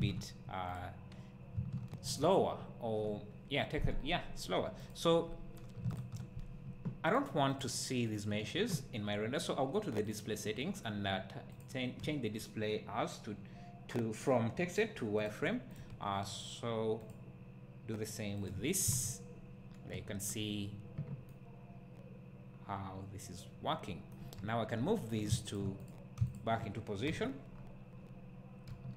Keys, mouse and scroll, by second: 0.7 click, 2.6 `, 4.9 click, 6.0 shift+click, 15.2 click, 18.5-21.3 drag, 18.9 alt+a, 21.3-25.2 right drag, 24.3 `, 25.2 click, 27.0 KP_7, 27.5 scroll up 1, 28.7 g.